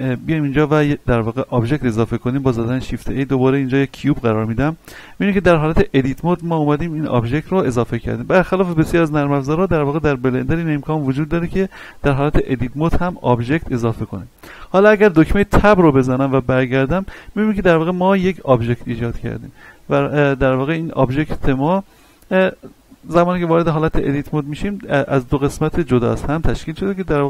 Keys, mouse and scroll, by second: 0.1 click, 2.3 shift+a, 3.8 click, 4.4-5.2 scroll up 1, 8.5 scroll up 1, 8.6-15.8 middle drag, 15.8 Tab, 20.4 click, 23.5 Tab, 24.0 middle click, 24.8 a.